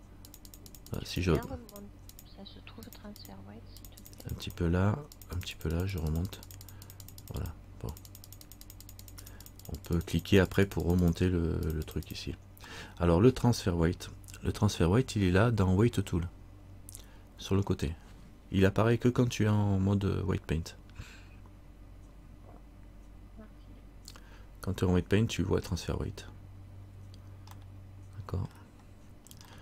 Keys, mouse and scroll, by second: 0.4-12.8 click, 13.0 middle click, 13.5-15.4 scroll down 1, 27.8 middle click.